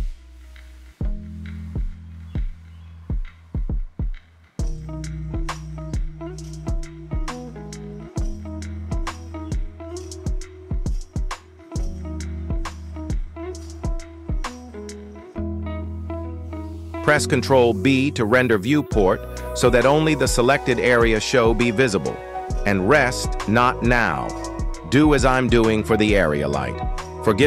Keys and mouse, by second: 1.9 g, 3.3-3.7 middle drag, 4.0 shift+middle drag, 6.5 click, 9.8 shift+middle click, 10.6 click, 11.0 click, 11.4 middle drag, 12.3 g, 13.6 KP_1, 15.3-15.9 shift+middle drag, 16.4 ctrl+b, 19.3 click, 19.9 r, 21.7-22.1 middle drag, 22.5 shift+middle drag, 22.9-23.9 typing, 25.3 shift+middle drag, 25.9 g.